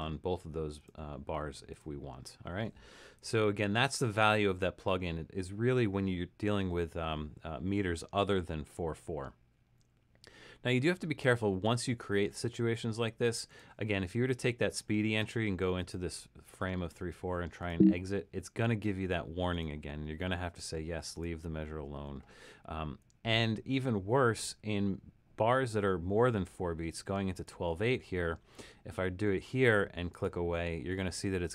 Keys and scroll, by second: 0.0-0.9 typing, 2.1 Escape, 3.5 super+=.